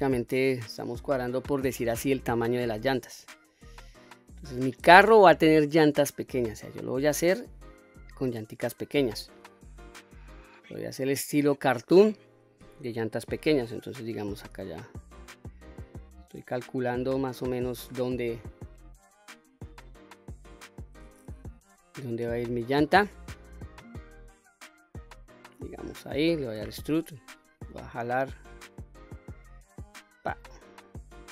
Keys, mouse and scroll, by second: 2.0 shift+middle click, 3.2-4.7 drag, 5.9 s, 9.2 click, 10.0 click, 14.5 click, 16.4-17.0 middle drag, 17.0-18.3 scroll down 3, 18.3 KP_1, 19.5-20.9 drag, 21.5 KP_3, 22.3-23.2 scroll up 3, 25.2 middle click, 26.5 e, 29.9 click, 30.5-31.3 middle drag.